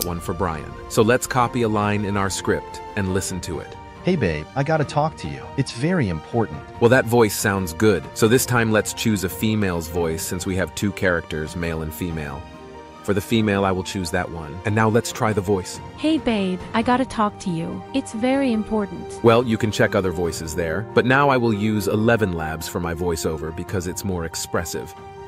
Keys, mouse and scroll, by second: 2.0 ctrl+c, 3.5 ctrl+v.